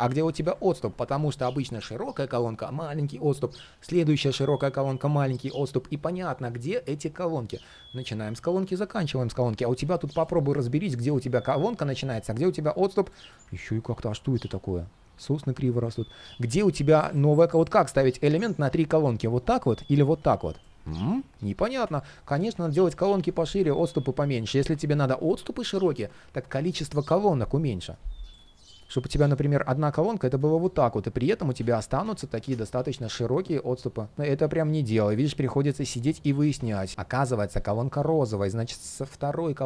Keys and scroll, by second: 0.2 super+z, 31.9 super+d.